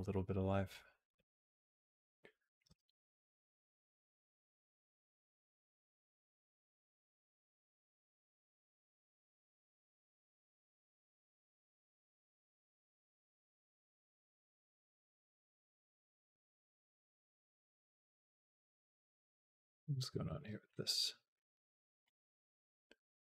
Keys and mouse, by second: 0.9 space, 2.5 space, 3.0-4.1 drag, 4.5 g, 7.0 click, 7.6 space, 9.6 space, 10.2-11.8 drag, 12.4 click, 12.7 g, 14.0 click, 14.4-16.1 drag, 16.1 space, 18.0 space, 18.8 =, 19.1 =, 20.0 middle click, 21.9-23.2 drag.